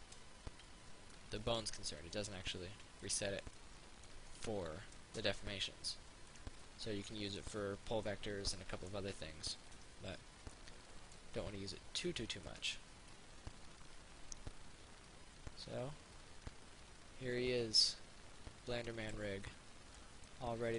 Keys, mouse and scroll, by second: 0.1 ctrl+z, 1.4 middle click, 2.6 ctrl+z, 3.8 middle click, 6.5 right click, 6.9-12.7 middle drag, 12.7 right click, 13.4-19.7 drag, 19.7-20.7 middle drag.